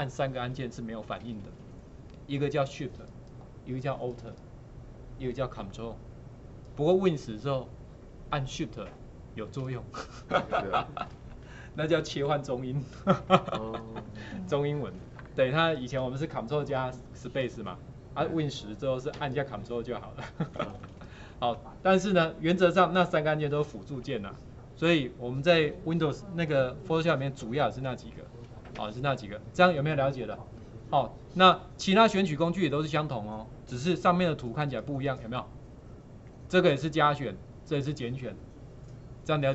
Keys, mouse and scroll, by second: 34.0 ctrl+4.